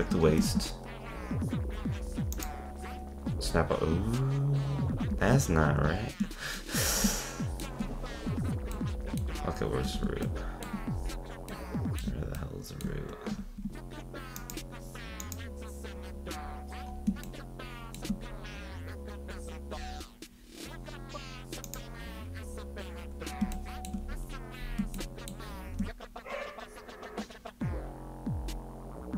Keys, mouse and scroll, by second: 0.3 shift+s, 3.5-4.1 middle drag, 5.2 z, 6.6-7.9 shift+middle drag, 7.9-8.7 scroll up 6, 8.7-9.2 middle drag, 9.2-9.8 scroll up 1, 9.8 ctrl+Tab, 10.2-11.0 shift+middle drag, 11.0-11.5 scroll down 1, 11.5-12.3 middle drag, 12.3-13.4 scroll down 1, 13.4 ctrl+Tab, 14.4 click, 15.2 click, 16.9-17.3 scroll up 1, 17.3-18.3 shift+middle drag, 18.3-19.3 scroll up 1, 19.3-20.4 scroll down 2, 20.4-21.6 scroll up 1, 21.6 click, 22.4-23.5 scroll up 2, 23.5-24.0 shift+middle drag, 24.0-25.0 scroll up 9, 25.0-25.6 shift+middle drag, 25.6-28.7 scroll up 2.